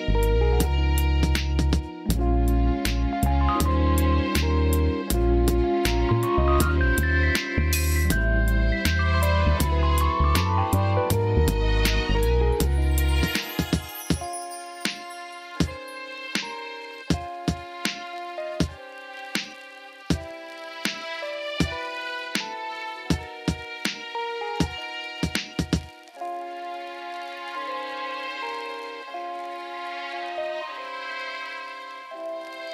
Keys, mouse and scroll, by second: 0.6 r, 1.1 click, 1.7 click, 2.9 KP_3, 4.0 r, 4.6 click, 5.3 KP_1, 6.5 r, 7.6 click, 8.7 click, 12.0 middle click, 12.4 click, 13.2 a, 13.4 click, 13.7 a, 15.4 Tab, 15.9 a, 20.2 r, 21.9 KP_3, 22.7 r, 23.7 click, 24.6 click, 26.2 KP_1, 28.9 click, 32.5 Tab.